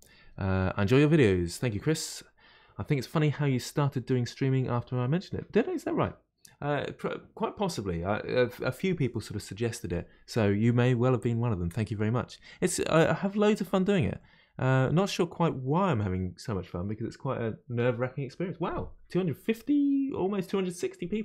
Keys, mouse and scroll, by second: 14.2-17.2 middle drag.